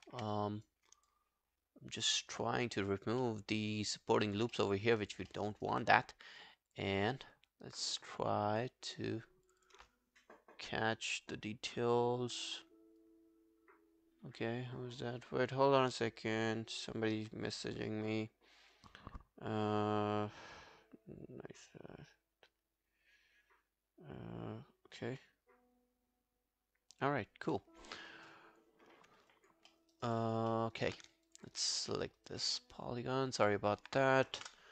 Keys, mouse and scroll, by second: 0.1 q, 0.4 right click, 0.9 scroll down 2, 1.1 alt+click, 3.2 alt+middle click, 3.6 alt+scroll down 1, 3.8 alt+click, 4.5 alt+middle click, 4.8 alt+right click, 5.0 alt+click, 5.3 alt+middle click, 5.5 alt+right click, 5.9 right click, 7.1 double click, 9.6 double click, 29.1 scroll down 2, 29.3 alt+click, 29.7 alt+middle click, 29.9 alt+right click, 30.2 alt+click, 30.5 alt+middle click, 30.8 alt+right click, 31.3 shift+click, 31.5 shift+click, 31.7-32.2 scroll down 2, 32.2 alt+middle click, 32.2 alt+right click, 32.4 alt+click, 34.5 ctrl+BackSpace.